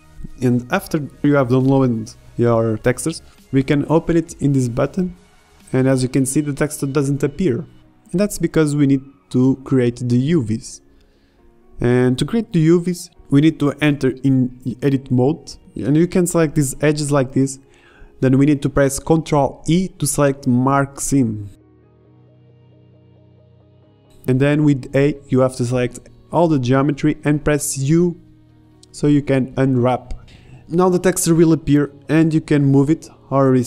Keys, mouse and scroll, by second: 11.2 Tab, 12.3 ctrl+Tab, 13.3 a, 14.9 KP_Divide, 19.1 z, 21.2 ctrl+e, 25.1 Tab, 26.0 Tab, 26.5 a, 26.8 a, 27.5 u, 31.1 Tab, 31.1 KP_Divide, 31.7 z.